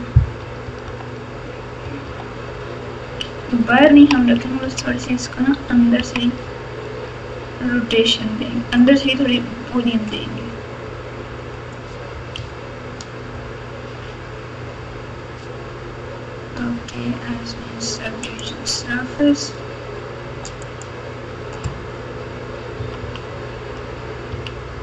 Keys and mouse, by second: 0.4-4.8 typing, 5.9-7.0 typing, 12.3 KP_4, 18.3-20.9 drag, 22.7 KP_6, 23.0 KP_6, 24.3 KP_6.